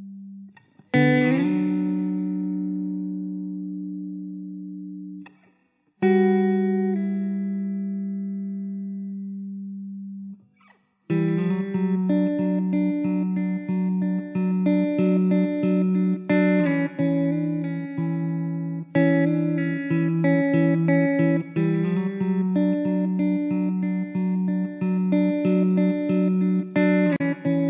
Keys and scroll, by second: 0.6 ctrl+z, 0.6 ctrl+z, 1.6 alt+z, 3.1 alt+z, 3.1 x, 3.6 Tab, 9.6 Tab, 11.5 ctrl+z, 13.1 x, 13.6 alt+z, 13.6 Tab, 16.5 ctrl+z, 16.8 Tab, 17.2 alt+z, 17.4 3, 20.6 alt+z, 21.3 Tab, 24.0 Tab, 24.4 Tab, 26.7 alt+z, 27.4 Tab.